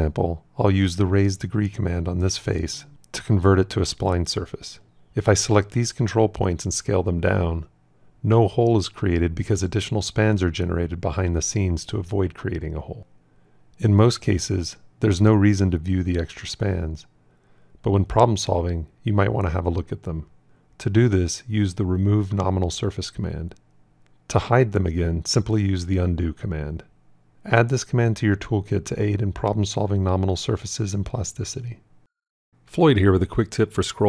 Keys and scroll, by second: 1.4 shift+s, 7.1 s, 21.8 f, 26.3 ctrl+z.